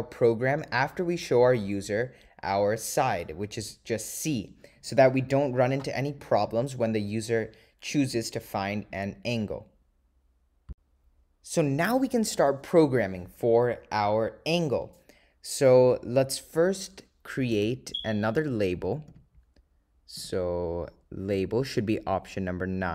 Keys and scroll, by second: 17.6 Return, 20.3 Right, 21.4 Left.